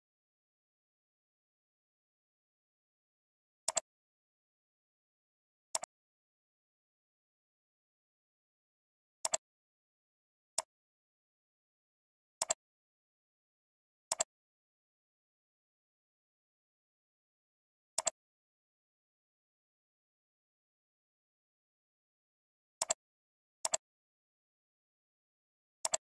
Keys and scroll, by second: 3.8 alt+space, 20.7 ctrl+h, 25.9 ctrl+space.